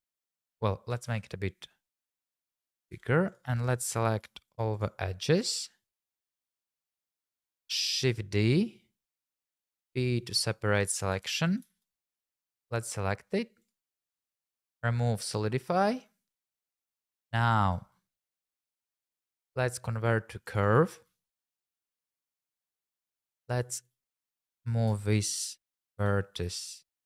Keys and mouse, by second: 0.4 click, 0.9 g, 1.1 x, 2.5 click, 2.9 Tab, 3.3 click, 3.6 shift+click, 4.5 shift+click, 4.7 shift+click, 5.3 shift+click, 6.3 shift+click, 7.1 shift+click, 8.0 shift+d, 9.4 p, 10.8 click, 11.1 Tab, 11.7 shift+z, 12.0 click, 15.2 click, 16.7 shift+z, 18.7 right click, 19.1-20.7 drag, 23.0 Tab, 24.1 click, 25.6 middle click, 26.0 g, 26.4 x.